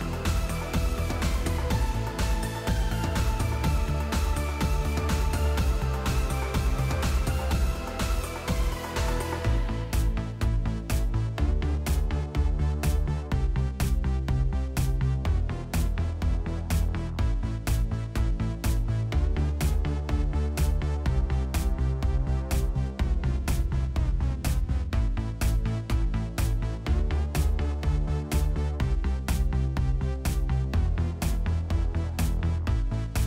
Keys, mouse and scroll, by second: 1.3 click, 3.9 click, 5.0 click, 6.2 click, 6.9 click, 7.4 click, 7.8 click, 8.3 click, 8.8 click, 9.2 click, 9.7 click, 11.8 click, 13.1 click, 14.5-17.4 typing, 16.2 Return, 17.6-18.1 scroll, 18.8 click, 19.2-19.7 scroll, 20.2 click, 20.5 scroll down 9, 20.8 space, 22.1-24.8 typing, 22.4 scroll, 23.9 scroll, 25.5 click, 25.5-26.1 scroll, 26.3 click, 26.7 space, 28.0 space, 28.4 space, 30.3 space, 30.9 click, 31.1 right click, 33.1 click.